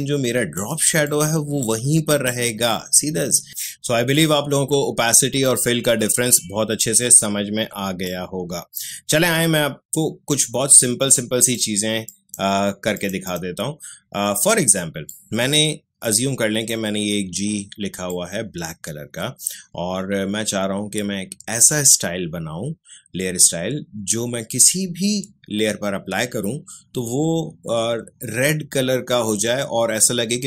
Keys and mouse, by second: 8.0-18.1 drag, 18.3-30.4 drag.